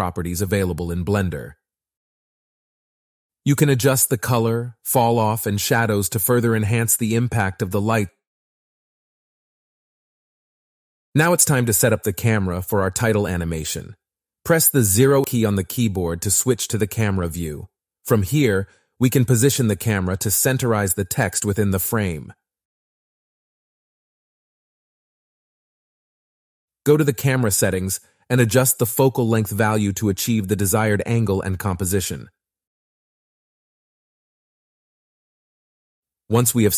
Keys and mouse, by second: 0.4 click, 3.6 click, 11.3-12.6 typing, 14.4 click, 15.1 click, 16.3 click, 19.1 click, 20.9 KP_0, 29.3-30.4 drag, 32.2 click, 35.2 click.